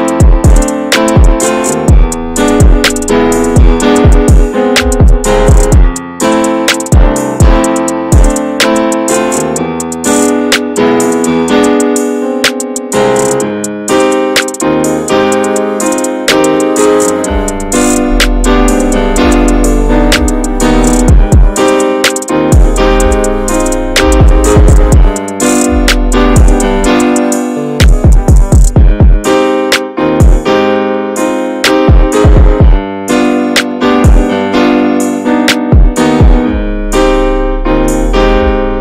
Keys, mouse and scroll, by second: 0.6 scroll down 4, 0.7 shift+middle click, 1.0 scroll up 1, 1.3 middle click, 2.3 shift+middle click, 2.4 scroll up 1, 2.5-3.6 shift+middle drag, 3.6-4.9 drag, 4.9 scroll up 1, 5.0 shift+middle click, 5.8 click, 6.7 shift+middle click, 6.9 ctrl+z, 9.7 click, 10.0 shift+middle click, 10.9-14.9 drag, 14.9-16.1 shift+middle drag, 16.1 click, 16.4 scroll up 1, 16.6 shift+middle click, 16.8 ctrl+z, 21.8 click, 22.0-22.5 scroll down 3, 22.3 shift+middle click, 22.5 middle click, 22.6 ctrl+z, 23.1 ctrl+z, 23.1-24.1 scroll up 1, 24.1-29.5 drag, 29.5 shift+middle click, 30.5 click, 30.6-32.2 shift+middle drag, 32.2 click, 33.1 scroll down 4, 33.3 shift+middle click, 33.4 scroll up 2, 33.6 shift+middle click, 34.3 click, 35.1 shift+middle click, 35.7 ctrl+z, 37.9 shift+middle click, 38.6-38.8 drag.